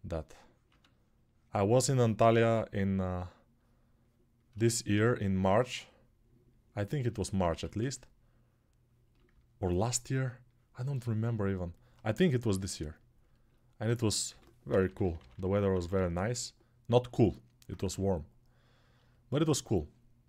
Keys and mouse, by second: 7.3 1, 14.1-15.7 typing, 17.7 g, 18.3-20.2 right drag.